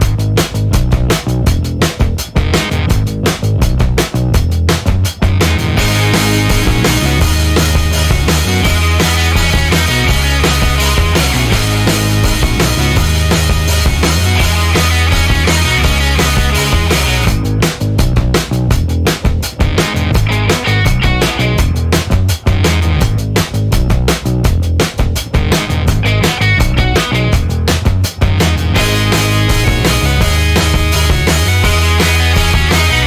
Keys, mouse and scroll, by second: 1.2 click, 2.0 click, 3.5-4.2 scroll down 2, 4.4 scroll down 2, 5.8-6.6 scroll down 4, 7.0 scroll down 2, 7.5-7.9 scroll down 2, 9.4 scroll down 2, 12.1 click, 13.0 click, 14.8 click, 15.3 click, 16.5 BackSpace, 17.5 1, 17.8 0, 19.4 shift+8, 20.7 5, 21.1 0, 22.2 /, 22.7 1, 23.1 3, 24.6 click, 26.9-28.2 typing, 31.7 click, 32.6 4.